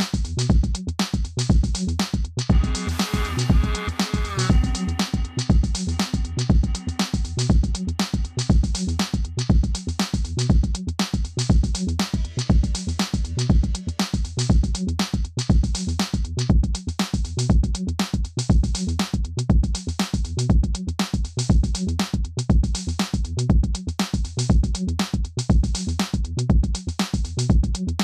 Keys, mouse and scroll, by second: 0.2 scroll down 1, 2.6 scroll down 1, 3.1 scroll up 1, 3.8 scroll down 1, 4.6-6.4 drag, 15.0 Return, 16.3-23.7 drag, 23.7 scroll down 1, 24.5 scroll up 1, 25.1 click, 27.9-28.0 scroll up 1.